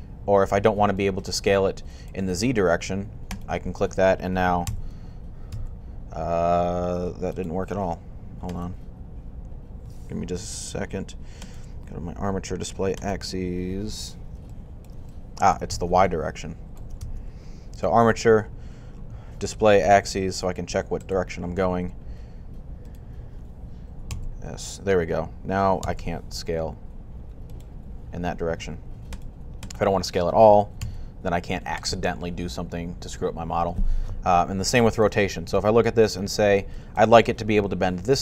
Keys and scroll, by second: 4.5 s, 5.3 z, 7.9-8.7 typing, 23.9 s, 27.6-28.3 typing, 30.7 s.